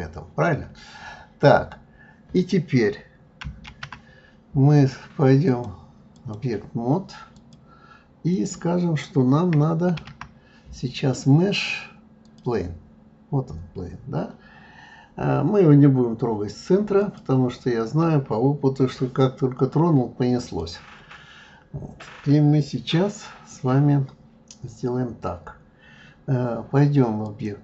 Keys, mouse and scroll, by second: 2.3 click, 3.6 shift+a, 5.5-7.5 drag, 8.3 click, 9.9 shift+a, 14.0-14.5 scroll up 1, 14.5-17.0 scroll up 1, 17.0 click, 20.4 click, 27.2-27.6 drag.